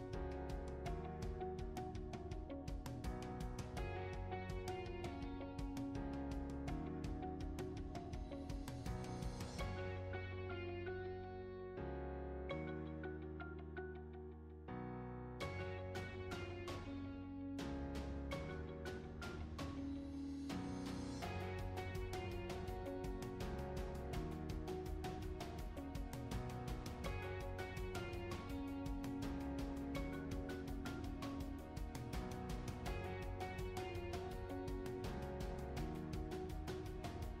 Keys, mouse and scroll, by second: 0.0-0.5 typing, 0.1 alt+middle click, 0.6 alt+click, 0.6 ctrl+r, 0.7 alt+click, 0.9 right click, 1.1 ctrl+z, 1.1 click, 1.3 alt+click, 1.7 alt+middle click, 1.7 alt+click, 1.8 scroll down 1, 1.8 alt+middle click, 1.9 alt+click, 2.0 alt+middle click, 2.1 alt+click, 2.3 right click, 2.4 ctrl+z, 2.4 shift+click, 2.7 f, 2.7 shift+click, 2.8 f, 2.9 alt+middle click, 2.9 1, 3.0 g, 3.1 alt+click, 3.2 scroll down 6, 3.3 alt+middle click, 3.4 alt+click, 3.4 alt+middle click, 3.5 scroll up 3, 3.5 alt+click, 3.7 alt+middle drag, 3.8 alt+click, 4.0 alt+middle click, 4.3 scroll up 1, 4.5 alt+click, 4.7 alt+middle click, 4.8 alt+click, 4.9 alt+middle click, 4.9 alt+click, 5.1 scroll down 2, 5.5 alt+click, 5.7 alt+middle click, 5.8 alt+click, 5.8 scroll up 1, 6.0-7.2 typing, 6.2 alt+middle click, 6.2 alt+click, 6.3 alt+middle click, 6.5 click, 6.7 click, 6.9 click, 7.0 click, 7.3 shift+click, 7.4 shift+right click, 7.7 alt+click, 7.9 alt+middle click, 7.9 alt+click, 8.3-20.3 typing, 8.6 alt+click, 8.7 alt+middle click, 8.7 ctrl+z, 8.8 alt+shift+click, 9.0 alt+middle click, 9.1 scroll up 1, 9.4 alt+click, 9.7 alt+middle click, 9.8 alt+click, 10.1 alt+middle click, 10.1 alt+click, 10.2 ctrl+z, 10.2 alt+middle click, 10.3 scroll up 2, 10.6 alt+middle click, 10.8 scroll down 3, 10.9 alt+click, 10.9 alt+middle click, 11.0 alt+click, 11.0 scroll up 1, 11.0 alt+middle click, 11.1 alt+click, 11.4 alt+middle click, 11.7 click, 11.9 alt+click, 12.1 alt+click, 12.3 alt+click, 12.3 alt+middle click, 12.4 alt+middle click, 12.5 alt+click, 12.6 alt+middle click, 12.9 alt+click, 13.2 alt+click, 13.5 alt+middle click, 13.5 alt+click, 13.5 scroll up 1, 13.6 click, 13.8 click, 13.9 shift+click, 14.0 alt+click, 14.0 alt+middle click, 14.2 alt+click, 14.3 scroll down 2, 14.4 alt+click, 14.6 alt+middle click, 15.0 click, 15.3 alt+click, 15.8 alt+click, 16.0 alt+click, 16.1 alt+click, 16.3 alt+click, 17.0 alt+click, 17.2 alt+click, 17.2 alt+middle click, 17.3 alt+click, 17.5 alt+click, 17.8 alt+click, 18.4 alt+click, 18.5 alt+middle click, 18.6 scroll up 2, 18.6 scroll down 4, 18.7 alt+middle click, 18.7 alt+click, 19.3 click, 19.4 ctrl+click, 19.5 shift+right click, 19.7 alt+middle click, 20.3 click, 20.8 shift+right click, 21.4 scroll down 5, 21.5 click, 21.9 alt+middle click, 21.9 scroll up 1, 22.0 click, 22.0-24.2 typing, 22.4 alt+middle click, 22.5 scroll down 1, 23.0 click, 23.6 ctrl+r, 24.4 click, 24.7 shift+right click, 25.2 alt+middle click, 25.2 scroll up 2, 25.3 click, 25.3 1, 25.4 right click, 25.7 2, 25.9 shift+click, 25.9 alt+middle click, 26.0 scroll down 3, 26.2 shift+click, 26.4 ctrl+r, 26.5 a, 26.7 shift+right click, 27.0 alt+middle click, 27.0 scroll up 1, 27.2 click, 27.4 shift+click, 27.9 shift+click, 28.4 a, 28.4 alt+shift+click, 28.5 shift+right click, 29.0 scroll up 1, 29.1 alt+middle click, 29.3 click, 29.7 alt+middle click, 29.9 click, 29.9 a, 30.0 alt+shift+click, 30.4 ctrl+r, 30.5 a, 30.5 alt+shift+click, 30.8 scroll down 2, 31.2 ctrl+shift+right click, 31.8 alt+click, 31.8 alt+middle click, 32.2 alt+middle click, 32.2 scroll up 2, 32.2 alt+click, 32.3 alt+middle click, 32.4 alt+click, 32.5 alt+middle click, 32.5 alt+click, 32.7 ctrl+click, 32.8 alt+middle click, 33.0 alt+click, 33.1-37.4 typing, 33.4 alt+click, 33.6 alt+click, 33.7 click, 33.9 alt+click, 34.1 alt+click, 34.2 scroll up 1, 34.2 alt+middle click, 34.5 alt+click, 34.9 alt+click, 35.0 alt+click, 35.1 alt+middle click, 35.1 scroll up 1, 35.3 alt+click, 35.3 ctrl+z, 35.6 alt+click, 36.1 alt+click, 36.5 alt+click, 36.8 alt+middle click, 36.8 alt+click, 37.2 ctrl+z.